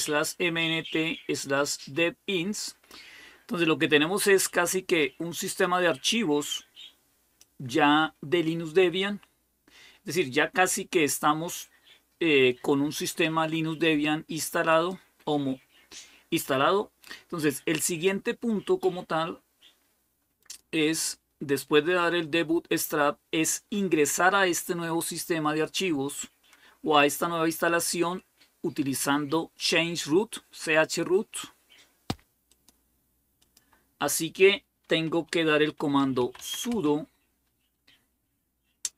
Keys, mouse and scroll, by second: 4.0-7.8 drag, 14.7 click, 20.2 click, 32.3-34.2 drag, 35.6-36.8 typing.